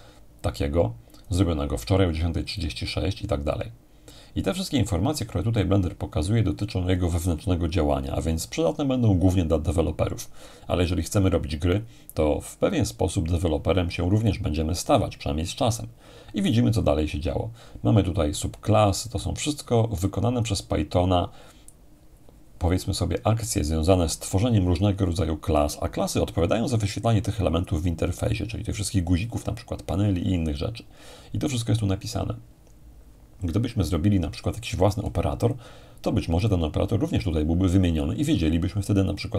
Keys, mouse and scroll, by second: 2.5-3.5 drag, 18.8-22.2 scroll down 2, 34.9-37.4 drag.